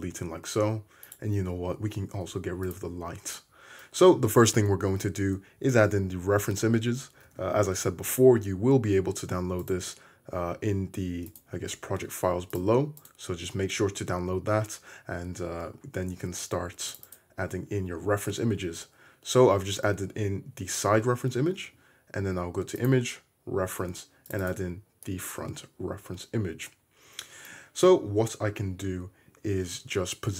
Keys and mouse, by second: 2.2 x, 3.4-12.0 drag, 5.2 right click, 7.2 shift+a, 10.3 right drag, 11.3 right click, 21.6 shift+a, 21.9-24.6 drag.